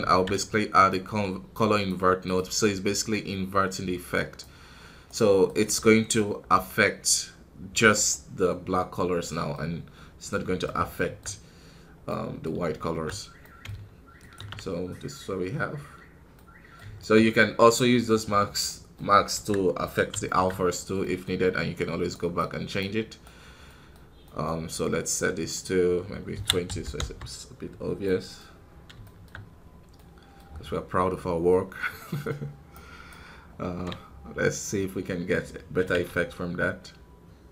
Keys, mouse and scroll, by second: 3.0-5.0 drag, 5.0-7.9 right drag, 7.9 click, 8.7 scroll down 2, 9.2 middle click, 9.6-10.2 scroll up 4, 10.2-11.4 middle drag, 11.4 scroll down 2, 12.0-14.1 middle drag, 14.1-16.2 ctrl+shift+drag, 16.3 middle click, 17.1 scroll up 2, 17.6 middle click, 18.1-18.6 scroll down 5, 18.6 middle click, 18.9 scroll up 2, 19.3 KP_1, 20.1-22.7 shift+middle drag, 22.7-25.3 right drag, 25.3-27.5 drag, 27.5 scroll down 3, 27.9-29.4 middle drag, 29.4-29.9 scroll down 3, 29.9 middle click, 30.3 scroll up 3, 32.6-34.2 right drag, 34.2-35.6 scroll down 1, 36.3-37.5 scroll down 1.